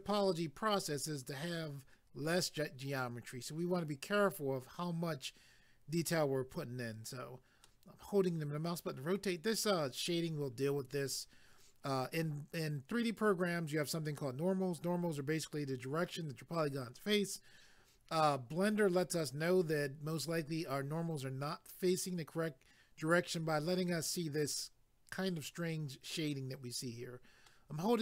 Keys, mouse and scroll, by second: 7.6 middle click, 27.5 middle click.